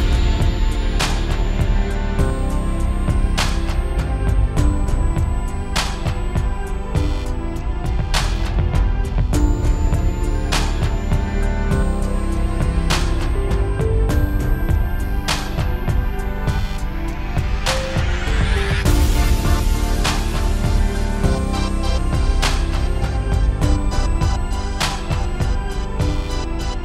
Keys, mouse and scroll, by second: 1.2 ctrl+z, 1.4 click, 2.0 Delete, 2.1 click, 2.4 scroll up 6, 2.5 middle click, 2.6-3.3 scroll down 5, 2.7 shift+middle click, 3.0 x, 3.1 middle click, 4.0 click, 6.7 KP_Decimal, 6.9 scroll down 7, 7.0 middle click, 7.1 scroll up 6, 7.2 middle click, 7.5 click, 7.9 click, 8.3 click, 8.7 middle click, 9.0 click, 9.2 middle click, 9.4 scroll up 1, 9.6 click, 10.8 click, 11.3 right click, 12.4 click, 12.9 scroll up 4, 13.1 click, 13.5 r, 15.1 click, 16.0 click, 17.2 middle click, 17.4 shift+middle click, 17.6 click, 18.3 click, 19.5 middle click, 19.7 click, 20.6 right click, 21.3 click, 21.8 scroll down 2, 21.9 shift+middle click, 22.0 scroll up 2, 22.3 click, 22.8 click, 23.1 scroll up 2, 23.3-23.7 scroll down 3, 23.5 scroll up 1, 23.7 alt+a, 23.8 scroll down 1, 23.9 scroll up 1, 24.2-24.7 scroll down 3, 24.4 middle click, 24.6 shift+middle click, 24.7 scroll up 5, 25.2 scroll down 1, 25.3 scroll down 1, 25.4 shift+middle click, 25.7 shift+middle click, 25.9 shift+middle click, 26.6 shift+middle click.